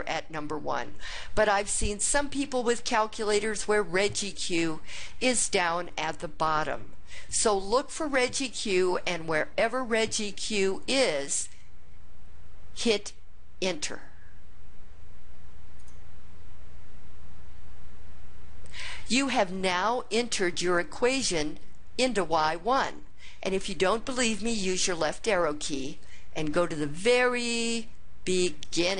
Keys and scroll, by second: 15.8 Return, 25.0 (.